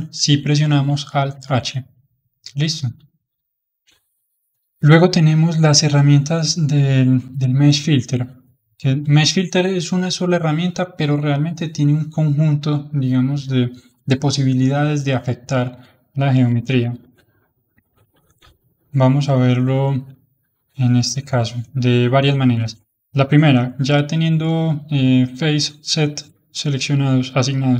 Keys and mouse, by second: 1.2 alt+h, 1.9-4.9 middle drag, 8.6-11.7 drag, 16.2 middle click, 17.0 alt+h, 17.5 middle click, 18.3 alt+m, 18.5 alt+middle click, 19.3-25.1 middle drag.